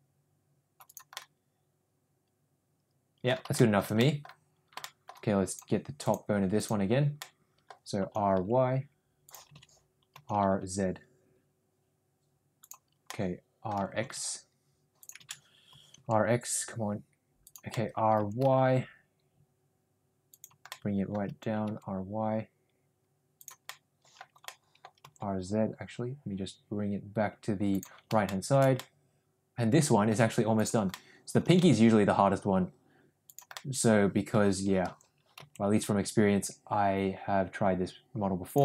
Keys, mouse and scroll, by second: 1.1-3.2 middle drag, 3.5-4.1 scroll up 2, 3.6 shift+middle drag, 4.1 middle drag, 4.7 scroll up 1, 4.9 shift+middle drag, 5.5 click, 6.0 click, 6.6 click, 7.1-7.7 middle drag, 8.0 r, 9.8 ctrl+z, 10.1 r, 13.0 middle click, 15.4 ctrl+z, 15.7 r, 17.7 middle click, 18.2 r, 20.7 scroll up 1, 20.8 middle click, 21.3 r, 23.7 middle click, 24.5 middle click, 25.0 r, 28.2 middle drag, 28.7-30.2 middle drag, 30.7 click, 30.9-31.4 middle drag, 31.4 r, 33.5 middle click, 34.8 r.